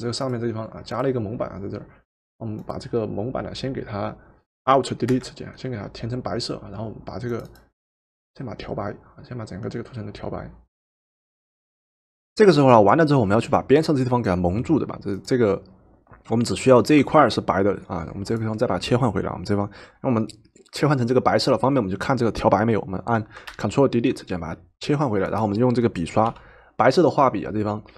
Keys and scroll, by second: 5.1 alt+Delete, 23.5 ctrl+Delete, 26.3 b.